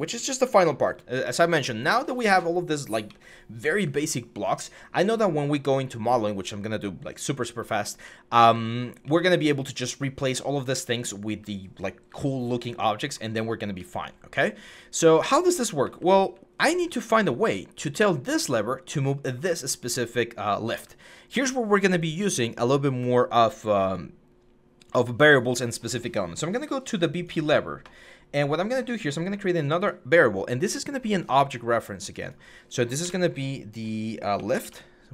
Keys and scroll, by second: 0.0-3.6 typing, 7.6-9.1 typing, 10.3-11.6 typing, 13.3-16.1 typing, 19.1-20.4 typing, 32.8 BackSpace, 34.1 typing.